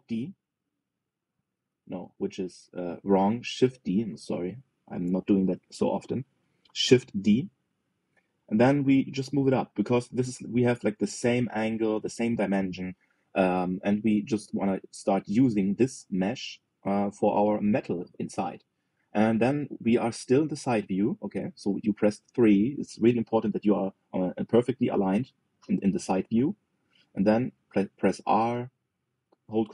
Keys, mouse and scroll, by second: 0.7 alt+d, 2.2 ctrl+z, 4.7 shift+d, 11.0-13.6 shift+middle drag, 29.1 r.